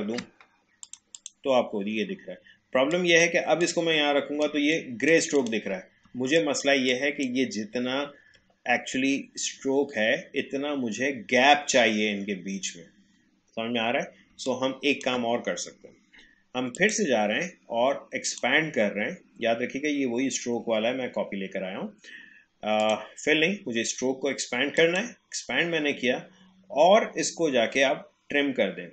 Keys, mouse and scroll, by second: 4.5 space, 4.7 click, 5.0 space, 5.3 click, 5.7 space, 6.3 click, 7.9-8.3 alt+scroll up 1, 14.3 space, 14.5 click, 14.8 space, 16.7 click, 22.8 click.